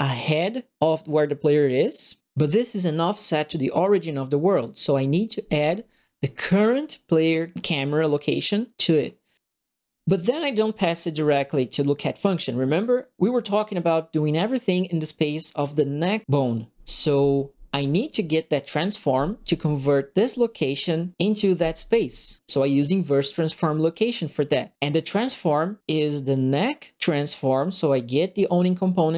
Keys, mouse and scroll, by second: 6.3 click, 9.5 right click, 12.5 right click, 13.7 middle click, 28.3 click.